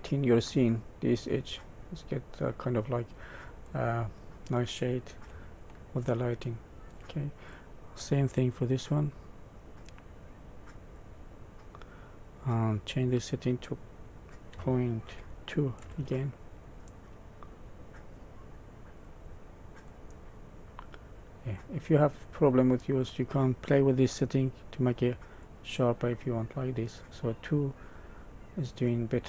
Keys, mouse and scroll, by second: 2.5 middle click, 3.6-5.2 scroll down 5, 5.6 shift+middle click, 6.4 shift+middle click, 7.3 click, 9.4 click, 13.0 click, 16.8 middle click, 19.2 scroll up 2, 19.8 middle click, 21.8 scroll up 1, 22.3 middle click, 25.2 click, 26.9 middle click.